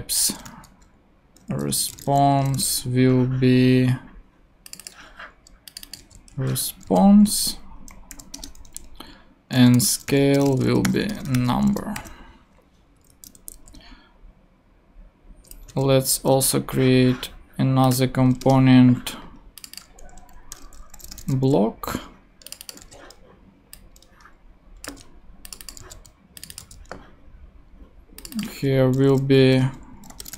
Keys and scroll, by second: 0.5-2.6 typing, 6.0 super+c, 6.9 ctrl+super+v, 7.4 super+v, 8.1 ;, 8.3 Return, 9.3-11.9 typing, 13.0 Up, 13.3 super+Left, 13.7 shift+super+Down, 14.3 shift+super+Down, 15.7 super+d, 16.0 super+Up, 18.4 Return, 20.3-21.8 typing, 23.8 super+c, 25.8 super+c, 26.6 super+v, 29.7-30.3 typing.